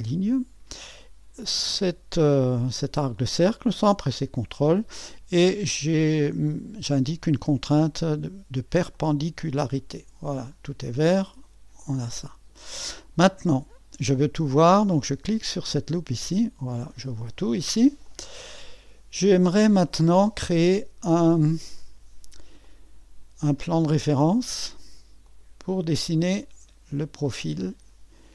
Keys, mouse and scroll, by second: 0.0 click, 3.9-7.0 drag, 8.9-10.2 drag, 10.2-10.8 scroll down 2, 11.8-12.9 drag, 15.9-16.9 drag, 18.0-28.3 drag.